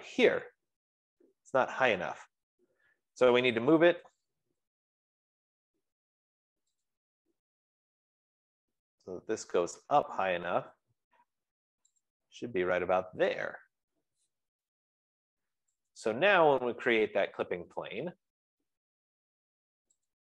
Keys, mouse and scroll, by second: 1.5 scroll, 3.7-5.0 typing, 7.4-11.2 drag, 10.8 F15, 12.5 click, 15.6 Escape, 16.6 click, 17.0 scroll.